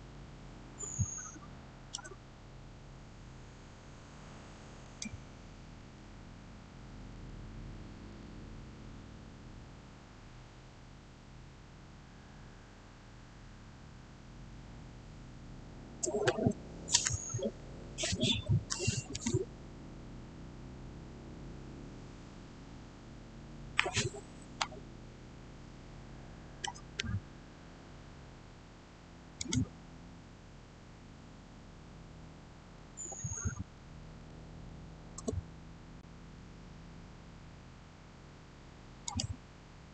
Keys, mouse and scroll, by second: 0.0 shift+middle click, 0.1-1.0 shift+scroll down 1, 4.7 shift+scroll down 1, 4.7 click, 6.5-7.5 typing, 7.9 Return, 24.5 Return, 25.2-29.2 shift+middle drag, 29.2 click, 33.5-34.0 typing, 35.0 Return, 38.9 click.